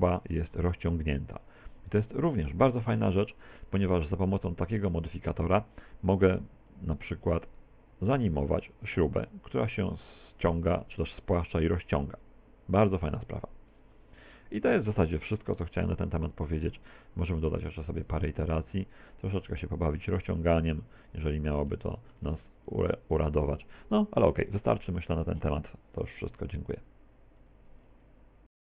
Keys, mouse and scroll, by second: 2.5-3.2 scroll down 7, 3.2 shift+middle click, 4.0 middle click, 6.8 click, 15.6 right click, 17.7 click, 17.9 click, 18.1 click, 18.3 click, 18.4 click, 19.4 right click, 20.3 click, 21.5 scroll down 5, 21.9 shift+middle click, 22.7 click.